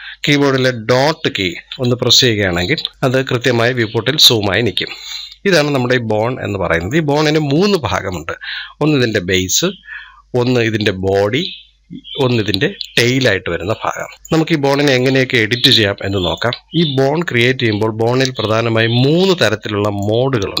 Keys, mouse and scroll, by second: 1.5 KP_Decimal, 2.9-5.4 middle drag, 5.4 scroll up 1, 5.5 scroll down 2, 6.0-9.0 middle drag, 13.3-13.9 scroll down 5, 14.0-14.4 middle drag, 14.4 scroll down 1, 14.7-17.2 middle drag, 17.2 scroll up 1, 19.6-20.6 drag.